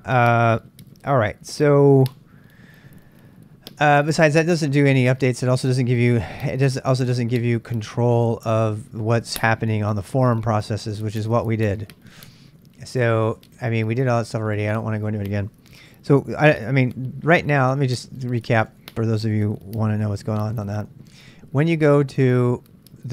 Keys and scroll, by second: 12.1-15.1 typing, 16.9 super+Tab, 17.9 super+Tab, 18.7 Tab, 20.9 super+Tab, 21.1 super+Tab.